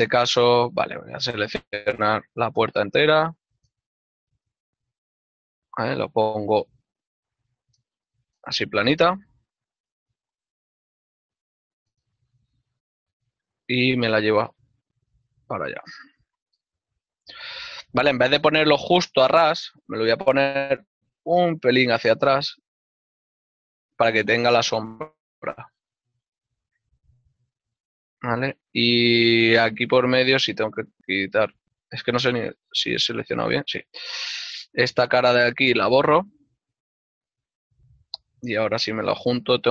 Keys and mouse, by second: 0.3 shift+middle click, 1.4 right click, 2.2 l, 4.3 click, 4.4 shift+middle click, 4.9 z, 7.6 click, 7.8 shift+middle click, 11.0 z, 12.5 shift+middle click, 14.1 KP_Decimal, 14.9 middle click, 17.2 g, 18.4 y, 19.0 ctrl+click, 21.5 x, 24.0 shift+click, 29.6 middle click, 30.6 Tab, 31.4 click, 31.5 alt+right click, 31.9 middle click, 36.4 click, 37.2 ctrl+Tab, 37.5 click, 37.8 alt+right click, 38.1-39.0 typing.